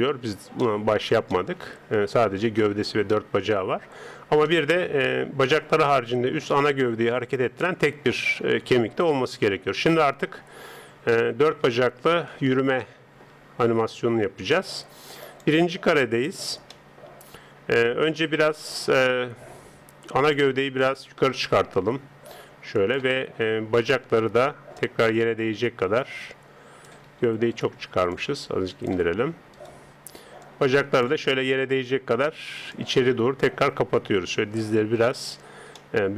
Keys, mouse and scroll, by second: 0.6-7.1 middle drag, 7.1 right click, 9.8 KP_3, 13.0-15.2 middle drag, 15.2 click, 16.0-19.1 middle drag, 20.3 click, 21.4 g, 23.8 right click, 24.8 click, 26.9 Escape, 27.5 right click, 28.2 click, 30.4 click, 35.8-36.1 middle drag.